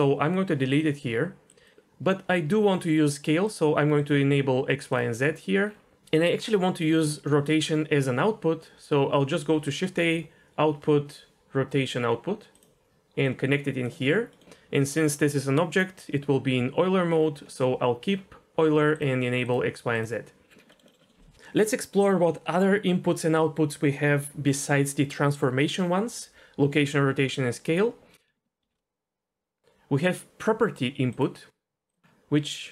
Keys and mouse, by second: 1.0 Delete, 1.5 click, 1.6 click, 3.4 click, 4.0 click, 4.9 click, 9.3 shift+a, 13.2-13.8 drag, 17.5 middle click, 18.9 click, 19.4 click, 19.9 click, 20.7 middle click, 21.0 middle click, 28.6 shift+a.